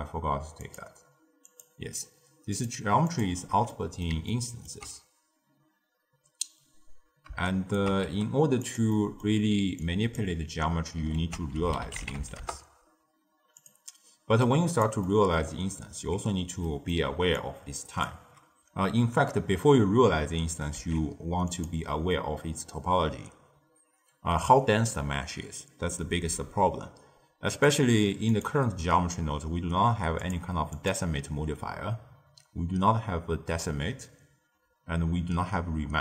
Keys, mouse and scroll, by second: 0.0 click, 0.5 click, 1.5 click, 2.5 click, 3.0 click, 3.6-7.2 middle drag, 7.4 shift+right click, 8.0 g, 8.8-9.8 middle drag, 9.8 click, 11.1 ctrl+a, 14.3 click, 15.0 middle click, 15.3-16.6 scroll up 1, 16.6-17.0 middle drag, 17.0 d, 17.3-18.0 drag, 18.0 d, 20.7 z, 27.6 click, 28.2 click, 30.1 click, 30.7-33.7 drag.